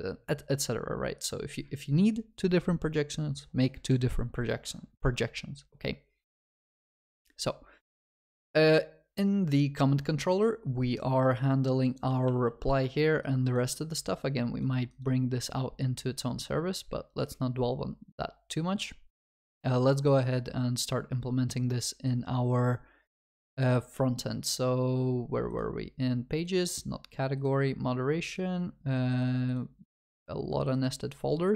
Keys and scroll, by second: 12.3 ctrl+s.